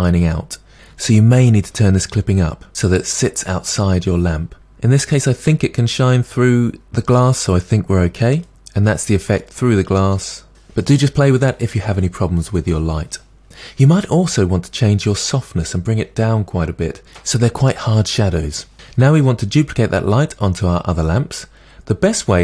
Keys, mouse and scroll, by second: 2.7-4.4 scroll down 3, 8.5-10.1 drag, 10.1-15.9 middle drag, 15.9-18.7 drag, 18.7-21.3 middle drag, 21.3 scroll up 4.